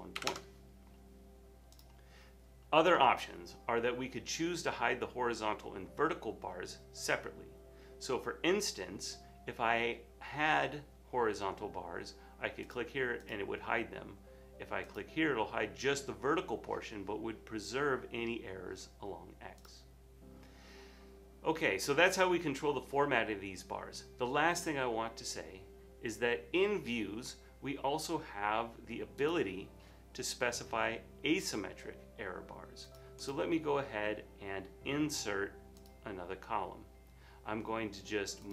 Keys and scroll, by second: 0.3 1, 0.3 Return, 3.4 typing.